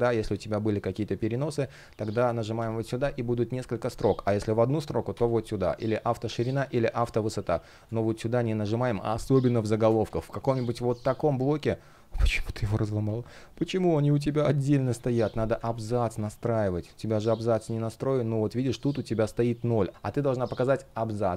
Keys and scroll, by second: 6.4 space.